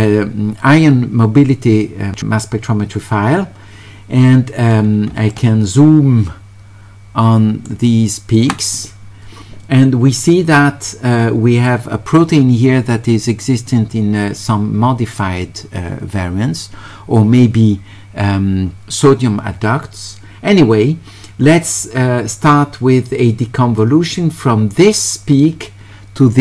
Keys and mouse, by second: 5.3-7.7 shift+right drag, 23.8-26.4 drag.